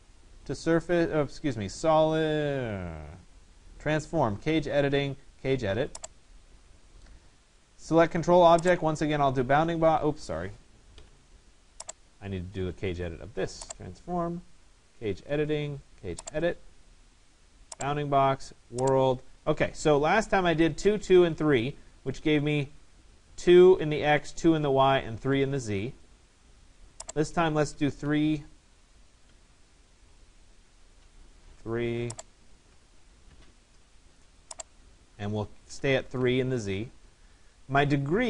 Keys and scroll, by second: 10.5 Escape, 27.7 3, 29.4 Tab, 30.4 Return.